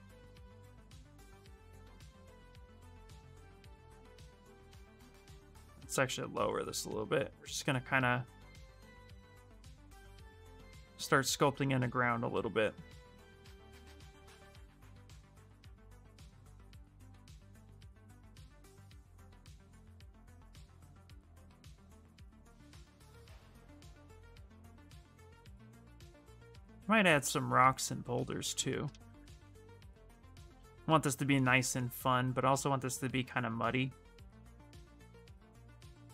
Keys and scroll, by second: 4.8 ctrl+z, 5.2 space, 28.8 shift+f, 29.2 shift+f.